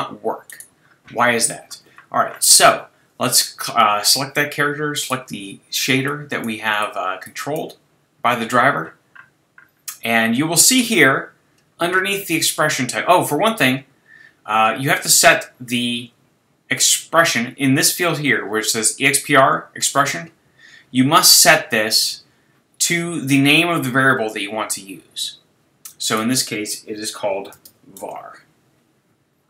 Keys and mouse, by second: 0.5-9.1 drag, 9.1-16.4 middle drag, 26.1-28.0 drag.